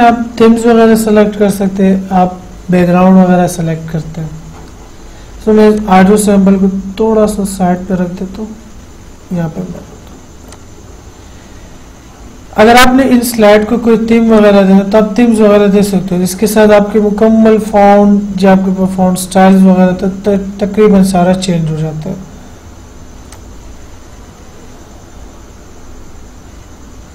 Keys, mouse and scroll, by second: 6.0-10.8 drag, 14.6 click, 19.8 click, 23.5 click.